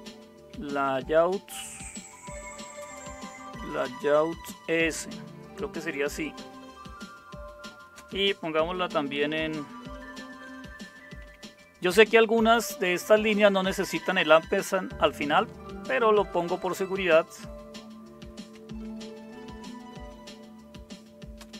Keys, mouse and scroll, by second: 0.0-1.7 typing, 2.8 typing, 4.5-5.4 typing, 8.0 space, 11.2 shift+7, 14.1 Left, 14.6 Right, 15.4 Return, 19.3 ctrl+o, 21.4 Return.